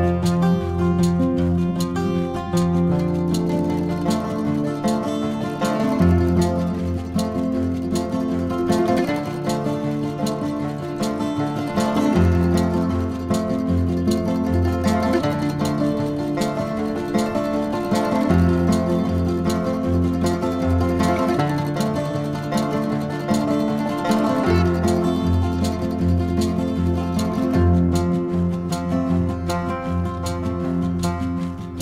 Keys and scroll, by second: 15.5 v.